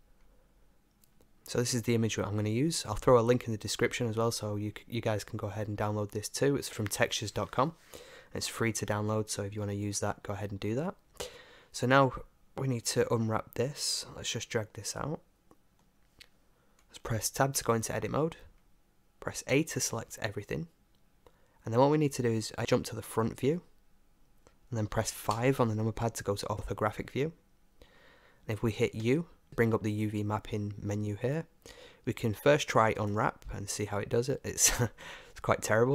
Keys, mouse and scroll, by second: 15.0-17.6 middle drag, 17.6 Tab, 19.5 a, 20.1 a, 23.0 KP_1, 25.3 KP_5, 29.0 u, 34.1-35.9 middle drag.